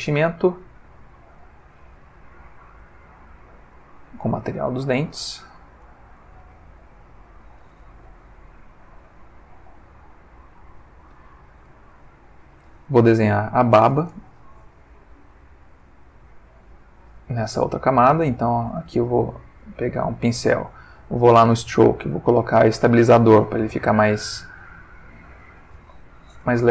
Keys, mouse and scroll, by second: 1.1-2.2 drag, 2.5-3.9 drag, 4.1 click, 5.1 click, 5.5 click, 11.9 shift+middle click, 15.8 click, 16.7 click, 19.7 click, 21.2 click, 22.3 click, 24.2-26.0 drag, 26.2 ctrl+z.